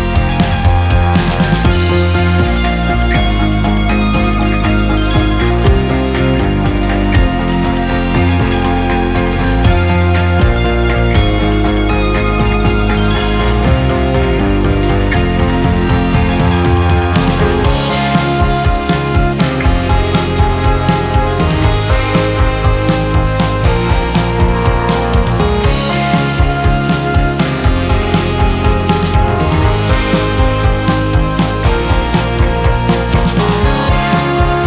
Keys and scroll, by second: 3.0 space, 3.8 space, 4.9-5.8 typing, 5.7 Return, 7.5 space, 11.2 space, 12.7 space, 14.2 space, 15.7 KP_1, 15.7 KP_0, 15.7 Return, 15.8 space, 17.9 space, 19.8 space, 22.7 space, 24.8 space, 26.5 space, 28.3 space, 31.1 space, 32.6 space.